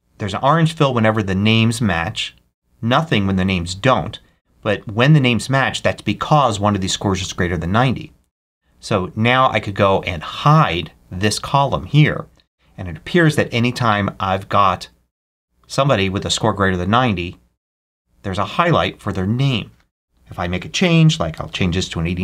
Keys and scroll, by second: 21.0-21.8 typing.